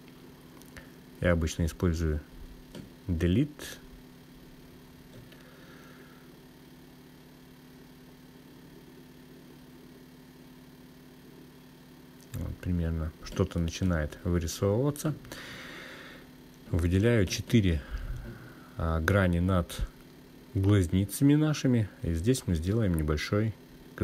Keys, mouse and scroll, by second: 10.5-12.4 scroll up 2, 12.4 click, 13.9 click, 15.9 click, 18.3 shift+click, 19.0 shift+click, 19.9 shift+click.